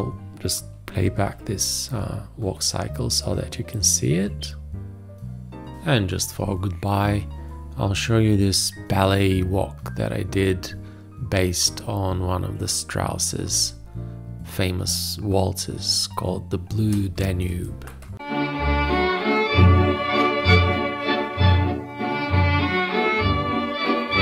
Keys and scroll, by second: 1.1 ctrl+Return, 11.9 space, 15.9 ctrl+Return.